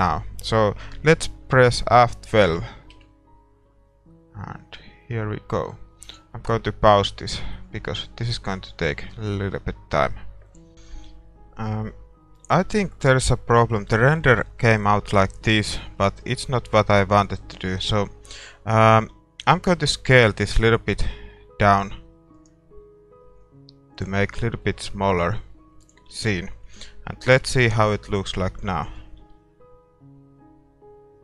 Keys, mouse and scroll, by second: 6.2 F12, 10.7-22.9 middle drag, 10.7 shift+z, 17.2 a, 19.1 a, 21.9 s, 22.9 s, 24.2-27.3 middle drag, 25.4 s, 27.3 ctrl+s, 27.3 KP_0, 27.8-28.3 scroll up 1, 28.3-28.6 scroll down 1, 28.6 middle click, 29.2 shift+z.